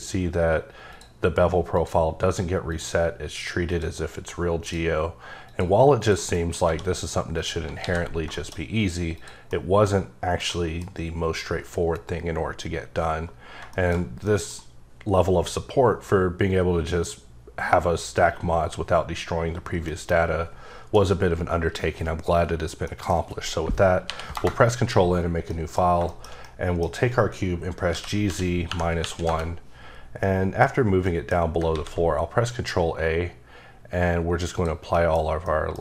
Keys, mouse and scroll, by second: 0.9 click, 1.7 click, 2.7 click, 3.7 click, 4.6 click, 5.4 click, 5.9 click, 6.3 middle click, 6.6 1, 6.9-7.3 scroll up 2, 7.3 click, 7.8 alt+x, 8.3 shift+middle click, 9.1 click, 9.5 middle click, 10.4 middle click, 13.6 shift+middle click, 19.9 middle click, 22.8 middle click, 24.0 ctrl+n, 24.3 Return, 25.2-25.8 scroll down 5, 25.5 middle click, 26.1 shift+middle click, 27.9 g, 28.2 z, 28.6 KP_Decimal, 29.0 KP_1, 29.2 KP_Enter, 30.2 middle click, 30.7 scroll up 1, 31.0 middle click, 31.7 ctrl+a, 34.5 click, 34.9 middle click, 35.1-35.4 scroll down 1, 35.4 middle click.